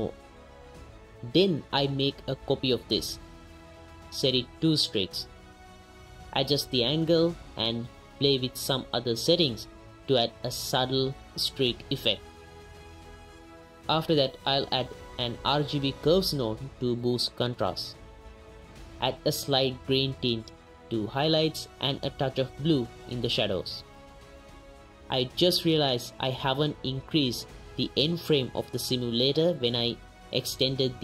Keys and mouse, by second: 0.7 middle click, 1.1 middle click, 1.5 click, 1.8 shift+d, 2.1 click, 3.0 ctrl+shift+click, 3.5 click, 3.8-4.7 right drag, 5.1 right click, 6.1 right click, 6.4 right click, 6.9 right click, 8.1 right click, 8.3 right click, 9.7 shift+click, 9.9 ctrl+shift+click, 10.1 click, 10.3 click, 10.7 click, 11.2 middle click, 11.6 click, 12.1 click, 12.8 middle click, 13.3 click, 14.0 click, 16.2 click, 16.5 middle click, 16.8-17.2 middle drag, 17.2 right click, 17.7 right click, 18.1 right click, 18.5 right click, 19.2 right click, 20.5 right click, 20.8 right click, 21.2 click, 21.8 click, 22.0 click, 22.2 click, 22.5 click, 22.7 click, 23.4 click, 23.6 click, 24.2 m, 24.8 m, 25.8-26.2 drag, 26.8-27.8 drag, 28.4 click, 28.7 click, 29.0 drag.